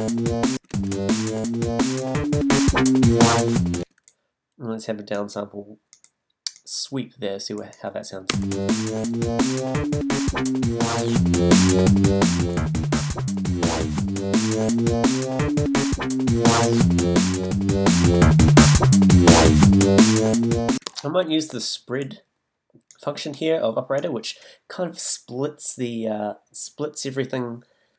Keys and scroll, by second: 0.5 space, 3.8 space, 8.3 space, 20.7 space.